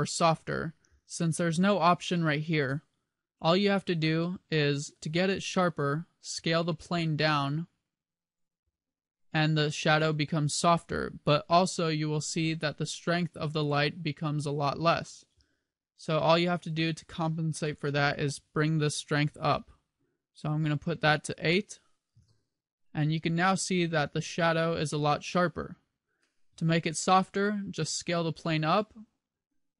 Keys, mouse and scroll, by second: 4.3 middle click, 6.3 s, 10.1 click, 10.6 g, 13.5 click, 17.0 click, 27.7 s.